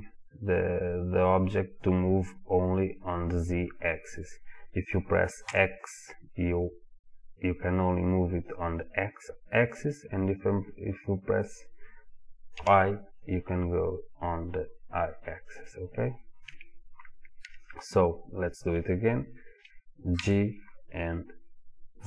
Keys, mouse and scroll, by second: 16.5 Escape, 20.2 g.